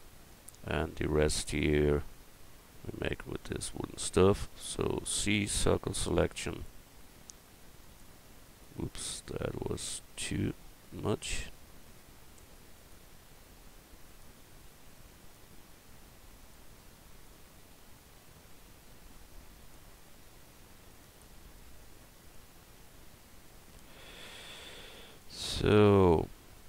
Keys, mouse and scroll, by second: 4.0 a, 4.7 c, 5.2-8.9 middle drag, 12.8-14.5 right drag.